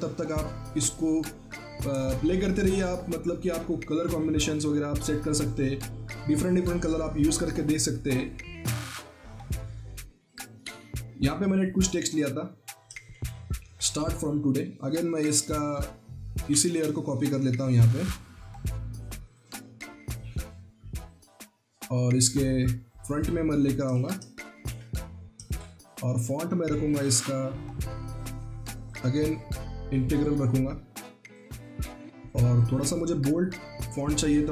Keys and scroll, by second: 13.1 ctrl+c, 16.6 ctrl+alt+z, 24.5 ctrl+v, 25.4 ctrl+a.